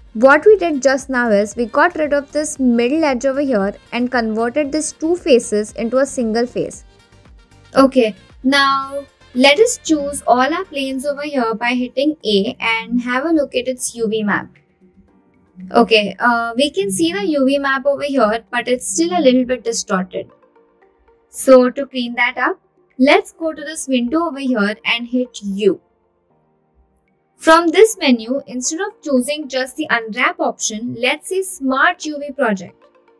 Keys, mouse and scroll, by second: 3.1 Tab, 3.6-4.2 middle drag, 4.5 click, 5.0 click, 5.6-6.6 middle drag, 7.1-7.6 shift+middle drag, 8.6 Tab, 10.1 a, 12.2 shift+middle click, 14.5 click, 26.5 u.